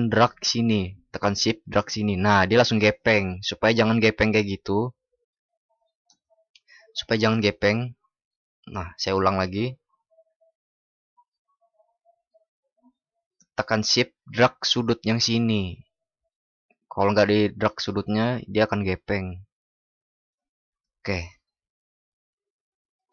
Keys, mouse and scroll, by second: 5.0 ctrl+alt+shift+y, 7.2 ctrl+alt+shift+y.